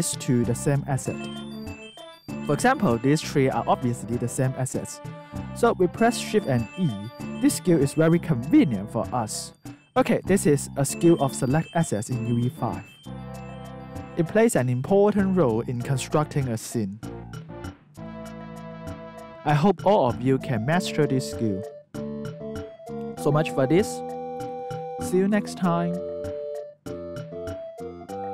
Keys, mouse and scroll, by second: 0.0 alt+right click, 1.5 alt+right click, 2.9 click, 4.9 alt+click, 6.1 shift+e, 6.9 alt+right click, 7.5 alt+click, 9.4 alt+right click, 9.8 alt+click, 10.2 alt+right click.